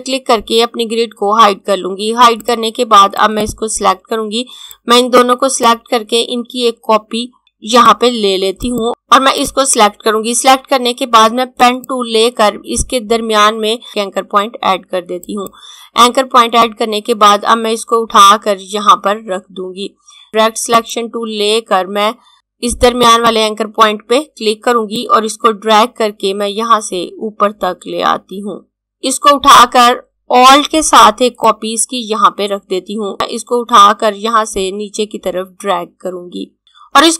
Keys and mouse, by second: 2.3 click, 8.7 click, 15.3 click, 23.1 click, 33.1 click.